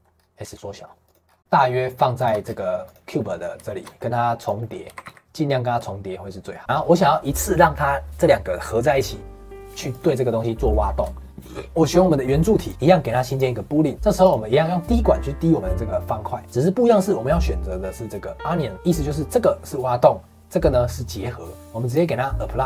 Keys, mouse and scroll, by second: 0.1 scroll up 1, 0.4 s, 1.2 scroll up 2, 1.4 g, 2.4 scroll down 4, 2.8 click, 3.1-4.3 middle drag, 4.3 click, 4.5 middle click, 4.8 s, 6.6-8.7 middle drag, 9.9 click, 10.6 click, 11.3 scroll down 4, 12.6-14.2 drag, 16.4-18.3 middle drag, 18.7 click, 21.5 scroll up 3, 21.8 click.